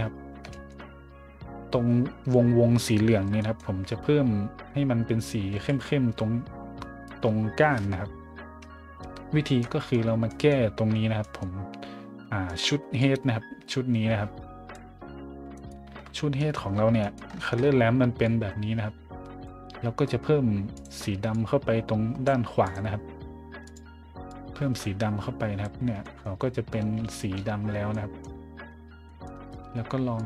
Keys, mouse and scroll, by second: 0.5 shift+middle drag, 3.1 middle drag, 3.4 middle click, 5.5 a, 9.2 scroll down 1, 9.6-9.9 middle drag, 10.3 middle click, 11.2 middle click, 12.4 middle click, 13.0-14.7 drag, 15.5 right click, 15.9 a, 16.3 middle click, 17.0 middle click, 17.3 scroll down 1, 17.6 scroll up 1, 18.2 click, 20.7 click, 21.3-22.2 drag, 22.6 click, 23.6 click, 24.3-25.6 drag, 26.0 middle drag, 27.1 shift+middle drag, 27.6 middle click, 27.9-28.2 middle drag, 29.0 middle click, 30.1-30.2 drag.